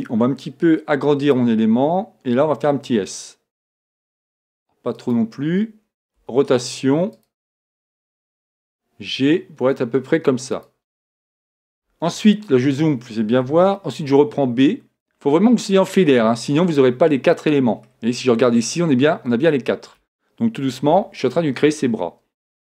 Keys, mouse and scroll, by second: 0.0-1.8 drag, 2.4 s, 5.1-7.1 drag, 6.2 r, 8.4 g, 10.7-12.4 drag, 11.2 middle click, 12.3-13.8 middle drag, 13.5 a, 14.1 b, 17.4-20.4 middle drag.